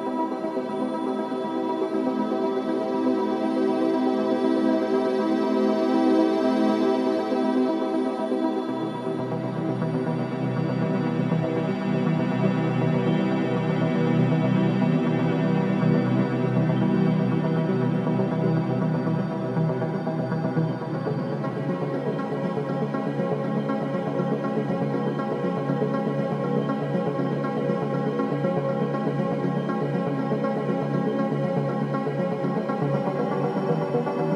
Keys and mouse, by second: 1.0 g, 2.0-4.7 drag, 10.5-13.9 drag, 11.5 ctrl+r, 15.0 click, 15.9 ctrl+r, 19.8 ctrl+r, 24.0 ctrl+r, 29.9 ctrl+r.